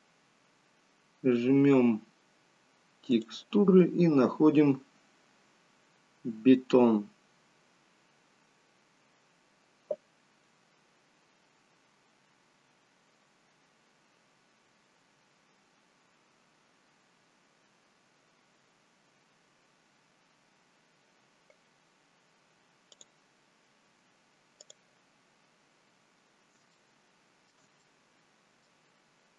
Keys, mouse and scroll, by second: 26.1-26.5 scroll up 2, 26.8 shift+middle click, 26.8-29.1 scroll up 2, 29.1 middle click, 29.1-29.3 scroll down 1.